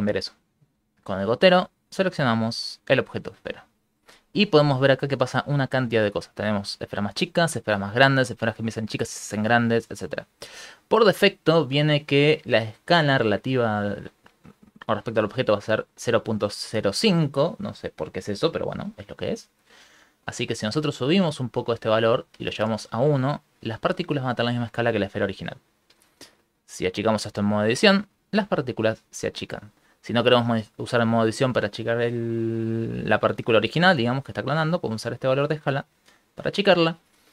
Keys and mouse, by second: 0.1 click, 20.6 click, 21.9 click, 26.2 right click, 26.7 Tab, 27.1 s, 29.7 Tab, 29.7 s, 30.1 right click, 34.4 middle click, 35.2 shift+click, 37.2 click.